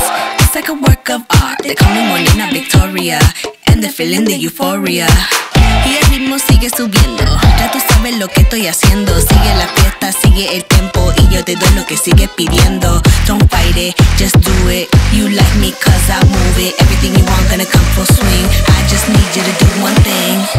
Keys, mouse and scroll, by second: 0.3 alt+click, 6.2-9.1 drag, 13.7 click, 13.8-17.6 drag, 20.4 click.